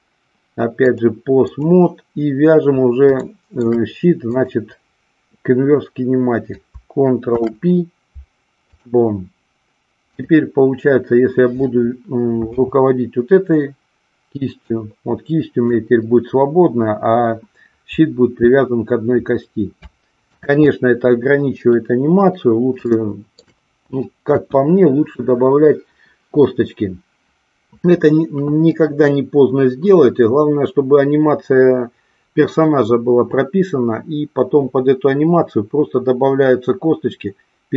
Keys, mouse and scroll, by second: 0.8 click, 3.1-3.5 shift+middle drag, 4.3-5.5 drag, 7.1 ctrl+p, 10.0-11.3 drag, 12.4 g, 14.7-15.7 drag, 20.3 ctrl+z, 22.9-23.3 shift+middle drag, 24.3 KP_1.